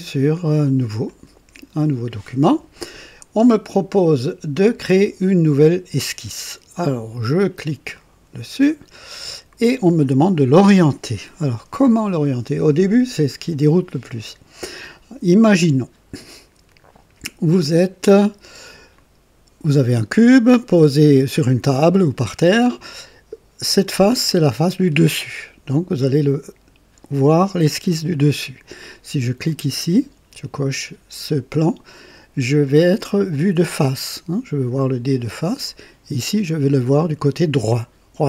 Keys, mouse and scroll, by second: 0.9 click, 7.8 click, 21.4 click, 23.7 click, 29.3 click, 35.5 click.